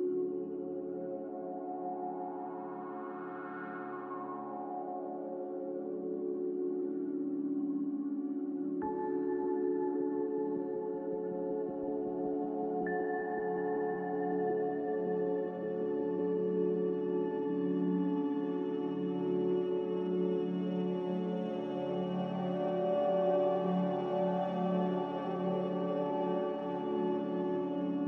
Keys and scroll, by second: 0.1 b, 2.0 m, 4.2 b, 9.0 m, 15.8 a.